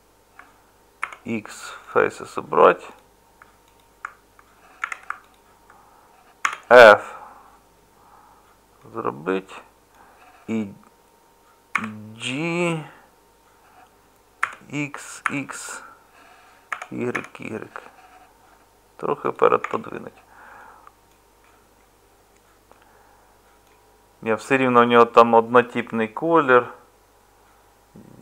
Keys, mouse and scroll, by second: 1.0 x, 4.8 2, 6.4 f, 11.7 g, 19.6 Tab.